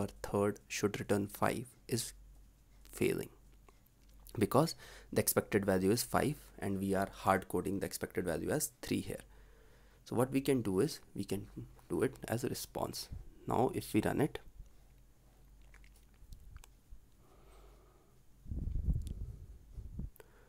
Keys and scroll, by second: 15.8 ctrl+s.